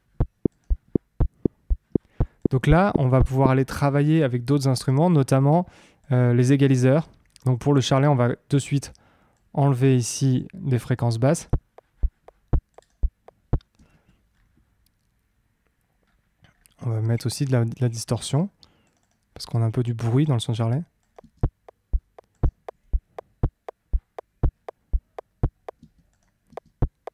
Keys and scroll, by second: 3.6 space, 11.2 space, 13.7 space, 21.1 space, 25.7 space.